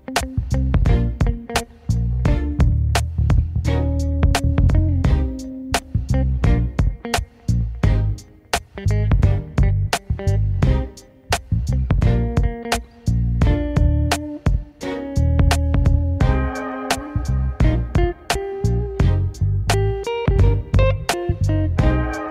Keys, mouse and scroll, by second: 0.7 shift+z, 1.6 click, 3.8 shift+click, 4.1 shift+z, 4.8 shift+z, 5.5 shift+click, 6.0 shift+click, 6.3 scroll down 4, 6.8-8.0 middle drag, 8.0 KP_1, 10.2 shift+z, 10.3 scroll up 2, 11.2-13.2 alt+s, 13.8 Tab, 13.9-14.2 scroll down 3, 14.2-15.3 middle drag, 15.3 scroll down 2, 15.5-16.0 middle drag, 16.0 scroll up 2, 16.8 Tab, 18.1 alt+shift+click, 18.6 scroll up 4, 19.1 click, 19.8 alt+shift+click, 20.0 scroll down 4, 20.6 middle click, 20.9 scroll up 2, 21.4 click.